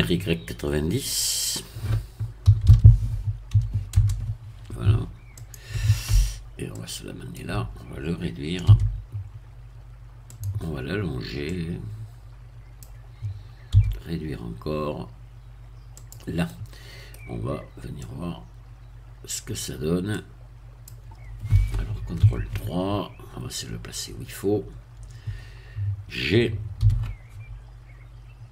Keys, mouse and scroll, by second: 2.4 r, 2.7 y, 3.5 9, 3.9 0, 5.4 click, 6.7 click, 8.7 s, 10.3 click, 11.5-13.0 drag, 13.7 s, 16.0 click, 16.5 middle click, 18.0-19.5 drag, 20.1-21.3 drag, 22.2 ctrl+3, 23.0-23.4 scroll up 2, 26.8 g.